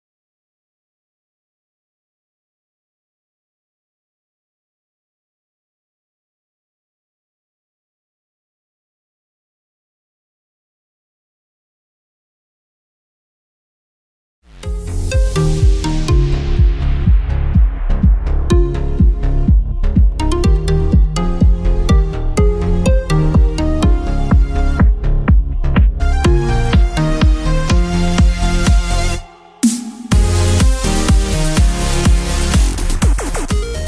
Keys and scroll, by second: 1.5 ctrl+w.